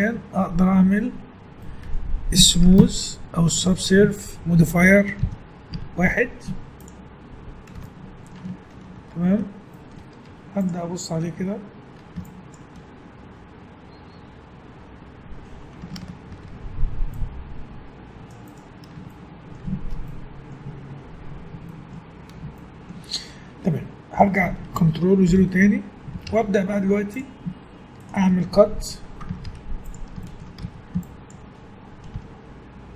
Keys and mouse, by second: 5.2 KP_1, 5.7 z, 9.2 z, 10.3 Tab, 13.9-15.6 drag, 16.3 ctrl+r, 19.2 click, 20.9-22.0 middle drag, 22.6 middle click, 25.3 ctrl+0, 26.3 ctrl+Tab, 29.5 ctrl+Tab, 30.6 a, 32.1 g.